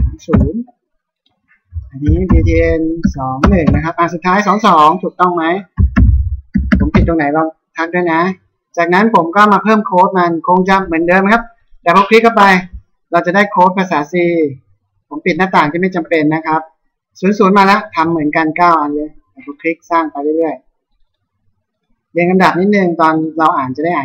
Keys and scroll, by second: 0.4 Return, 2.0 b, 3.7 Return, 5.8 b, 7.0 Return.